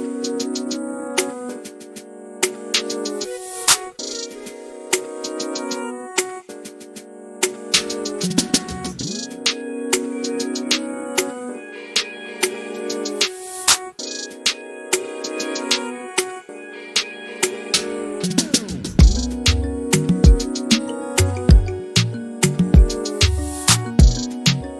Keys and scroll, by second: 12.1-13.2 typing.